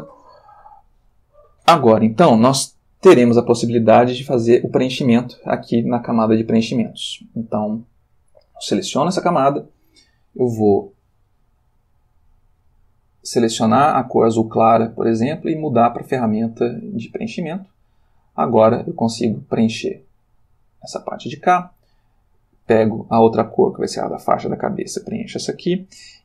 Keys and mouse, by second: 9.0 click, 12.1 click, 14.1 click, 15.6 click, 18.4 click, 22.5 click, 23.9 click, 25.0 click.